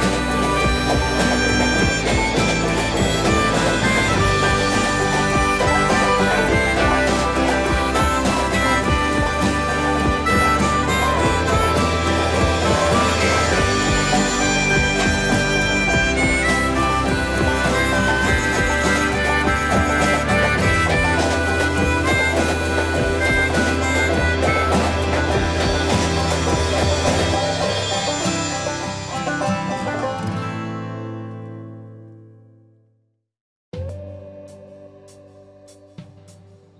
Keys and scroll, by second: 0.0 space, 0.6 Delete, 2.6 Delete, 5.5 space, 5.5 Escape, 16.4 shift+Delete, 16.8 Escape, 17.0 Escape, 17.2 Escape, 23.8 m, 26.6 shift+space, 28.4 ctrl+c, 28.6 Escape, 29.9 ctrl+shift+v, 31.4-33.0 typing, 35.2 m.